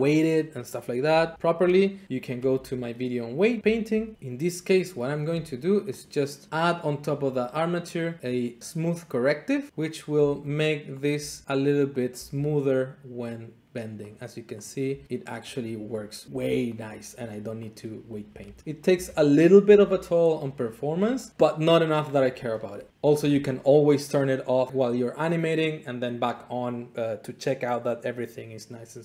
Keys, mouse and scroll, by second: 1.1 a, 2.4 alt+r, 3.6 alt+click, 4.1 middle click, 5.4 Tab, 5.4 middle click, 6.0 click, 7.2 click, 9.7 click, 10.2 Tab, 11.0 click, 11.2 r, 11.5 click, 12.0 click, 12.2 r, 14.0 click, 14.7 click, 15.0 r, 15.5 click, 16.0 click, 16.2 r, 16.3 r, 16.8 click, 18.2 click, 18.4 alt+r, 19.6 alt+r, 22.9 `.